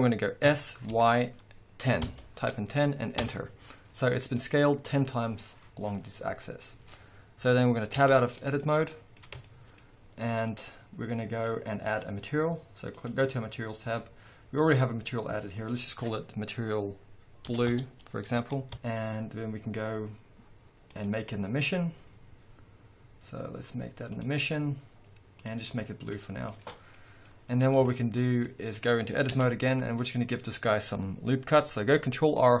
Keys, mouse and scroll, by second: 0.5 s, 3.3 Return, 3.9-4.3 scroll down 2, 5.1 scroll up 1, 8.0 Tab, 8.6 middle click, 9.4-10.0 shift+scroll up 1, 10.0-10.4 scroll up 1, 10.4 middle click, 11.3-12.9 middle drag, 12.9 click, 15.5-26.5 drag, 18.7 Return, 26.8 scroll down 1, 26.9-29.3 middle drag, 27.3-27.9 scroll up 1, 29.3 Tab, 29.5-32.6 middle drag, 30.0-31.6 scroll up 2.